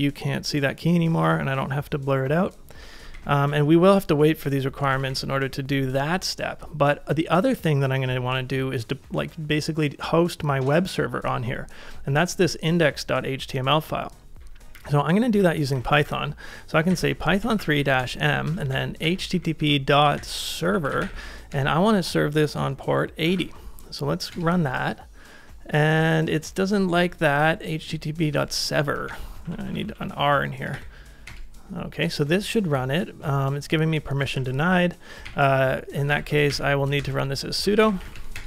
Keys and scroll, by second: 3.0 ctrl+a, 3.1 k, 5.0 ctrl+a, 14.8-21.6 typing, 23.0-23.8 typing, 24.3 Return, 29.1 Up, 29.4 Left, 29.9 Left, 30.0 Left, 30.1 Left, 30.7 typing, 31.3 Return, 34.4 ctrl+a, 35.3 Up, 36.0 ctrl+a, 36.5 Up, 37.0 alt+Left, 37.1 alt+Left, 37.3 alt+Left.